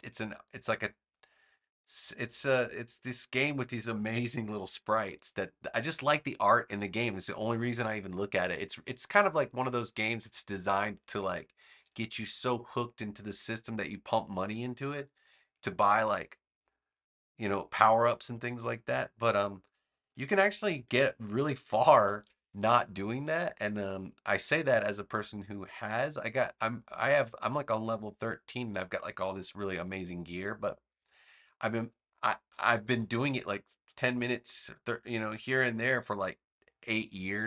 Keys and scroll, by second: 21.7 super+=, 22.8 space.